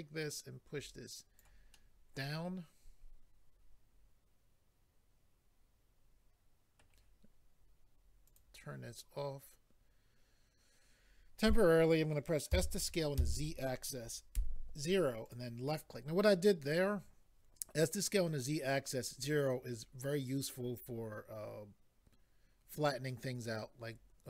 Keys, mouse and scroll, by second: 1.8 middle click, 8.3 click, 13.2 z, 14.3 0, 15.2 click.